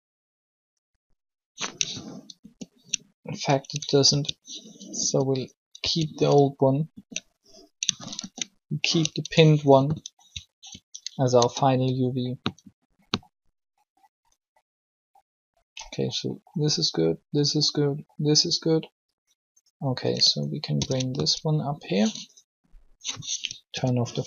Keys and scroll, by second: 2.4 ctrl+z, 4.1 ctrl+y, 5.0 ctrl+z, 5.8 ctrl+y, 6.9 ctrl+z, 8.2 ctrl+z, 9.2 Tab, 11.3 alt+shift+Tab, 20.5 ctrl+l, 23.7 o.